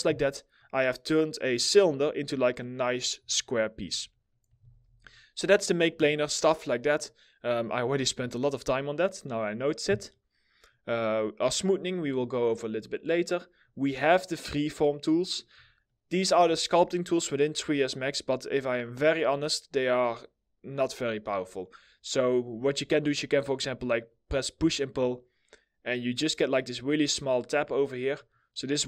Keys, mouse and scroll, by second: 3.0 alt+middle click, 3.8 middle click, 4.2 ctrl+z, 7.8 middle click, 13.5 middle click, 15.5 alt+middle click, 16.7 middle click, 17.4-17.9 scroll up 1.